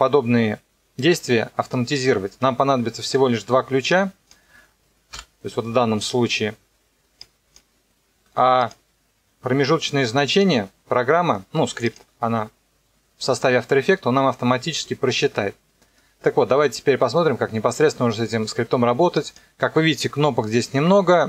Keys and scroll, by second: 5.1 Delete.